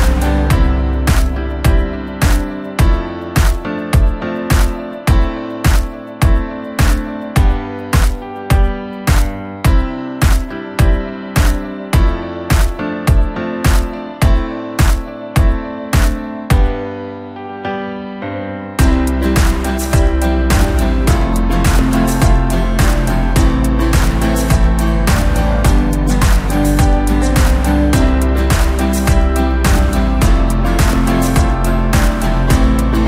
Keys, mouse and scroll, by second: 1.0-2.4 middle drag, 2.4 KP_7, 3.0-3.3 scroll up 2, 3.3 Tab, 3.7-5.8 middle drag, 5.8-6.1 scroll up 3, 6.1-7.4 middle drag, 7.4 alt+s, 10.0-11.7 middle drag, 11.7 scroll up 2, 12.4 click, 12.7-13.9 middle drag, 13.9 alt+s, 15.4 click, 16.3 alt+s, 17.5 scroll down 3, 17.7-19.7 middle drag, 19.7-20.5 scroll down 3, 20.5 KP_1, 21.1 scroll down 2, 21.4-22.4 middle drag, 22.4 click, 23.2 KP_1, 24.1 g, 26.4 KP_7, 27.4 Tab, 27.9 scroll up 2, 28.1 scroll down 2, 28.3-30.3 middle drag, 30.3 KP_1, 30.9-31.7 scroll up 4, 31.7-32.4 scroll down 4, 32.4 Tab, 32.7 scroll up 1.